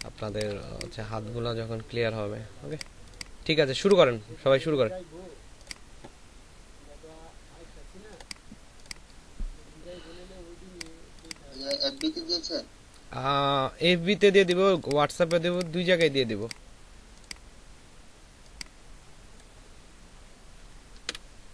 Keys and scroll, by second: 0.1 ctrl+alt+space, 20.9 ctrl+c.